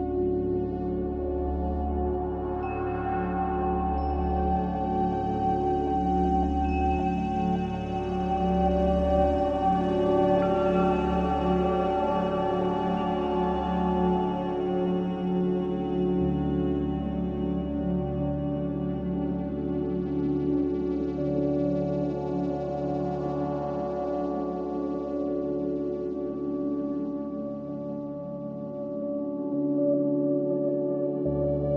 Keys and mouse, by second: 0.5-2.7 drag, 6.4 click, 10.8-11.3 middle drag, 14.2 click, 16.5-20.0 middle drag, 22.2-22.8 shift+middle drag, 23.0 shift+middle click, 23.6 ctrl+s, 24.2 Tab, 27.8-28.5 drag, 29.0 Tab, 29.5 Tab.